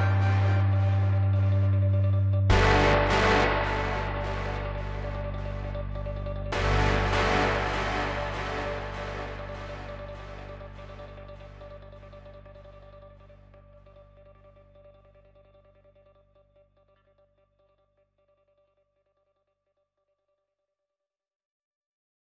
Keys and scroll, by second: 3.9 alt+w, 8.2 ctrl+z, 14.1 alt+w, 19.4 ctrl+z, 20.9 alt+w.